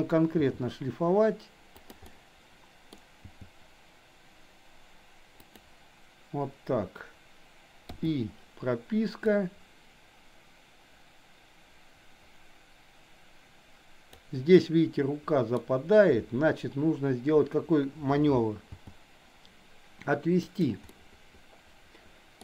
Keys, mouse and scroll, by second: 0.4 g, 2.1 middle click, 3.3 g, 9.3-14.2 drag, 14.6-15.6 middle drag, 18.8 g, 21.0-22.4 middle drag.